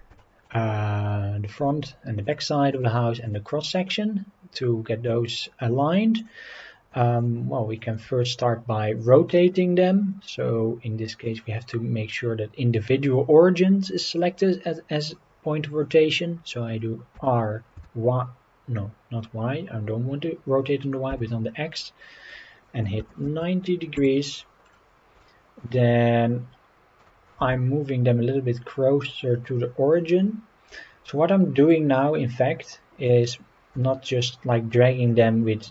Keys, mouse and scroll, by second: 0.2 middle click, 0.5-1.7 shift+middle drag, 1.8 scroll up 2, 2.2 click, 2.7 click, 3.2 click, 3.9-5.0 middle drag, 6.2 click, 7.1 shift+click, 7.7 shift+click, 8.4-9.1 middle drag, 11.2-15.8 drag, 17.1 r, 21.1 x, 23.0 KP_9, 23.2 KP_0, 23.9 Return, 24.6 scroll down 2, 25.2-25.8 shift+middle drag, 27.0 g, 27.4 shift+z, 31.3 scroll up 2, 31.6-32.0 scroll down 2, 32.7 middle click, 33.7 g.